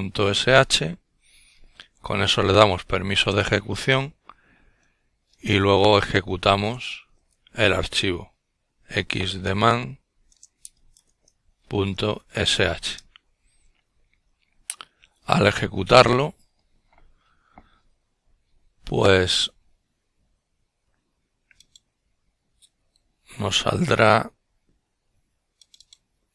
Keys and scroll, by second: 2.5 ■, 3.7 typing, 5.2-9.0 typing, 9.3 Return, 11.5 typing.